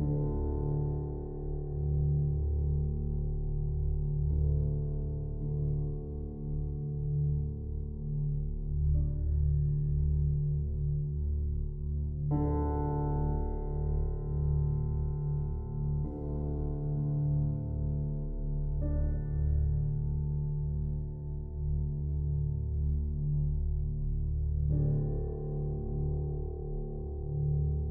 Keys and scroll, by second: 9.4 ctrl+c, 12.0 ctrl+v, 13.0 ctrl+t.